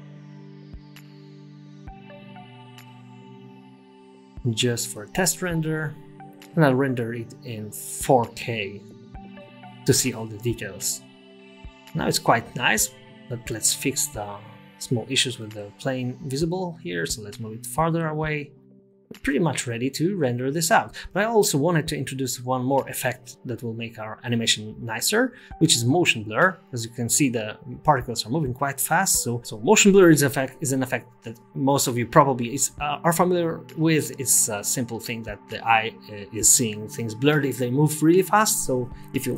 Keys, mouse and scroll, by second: 1.1 click, 5.7 click, 6.1 click, 6.8 click, 8.4 click, 9.0 KP_0, 15.5-16.1 scroll down 11, 15.5-17.5 typing, 15.7 middle click, 18.6 space, 23.2 space, 23.8 KP_0, 24.7-25.3 scroll up 5, 25.3 space, 26.0 space, 26.3 space, 31.2-32.6 scroll down 1, 32.6 scroll down 1, 33.7 click, 34.2 space, 37.3 space, 37.9 KP_0, 38.7-39.3 scroll up 9.